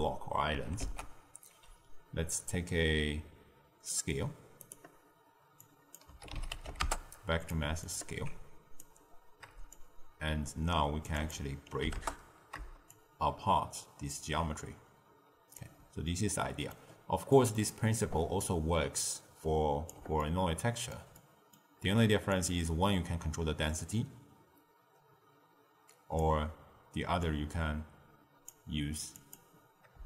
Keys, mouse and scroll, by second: 0.7 ctrl+a, 5.5 drag, 7.8 alt+click, 9.7-15.9 shift+drag, 16.0 middle click, 16.9-17.2 scroll down 2, 17.2 middle click, 17.9 click, 18.9 click, 20.1-22.2 ctrl+middle drag, 22.2-25.4 drag, 27.1 click, 29.1 click.